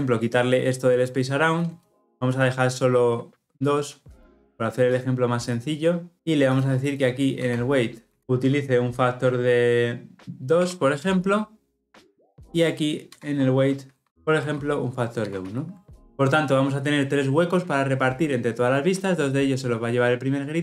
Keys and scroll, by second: 8.2 Return, 14.0 Return, 15.1 ctrl+alt+l, 15.5 ctrl+alt+o.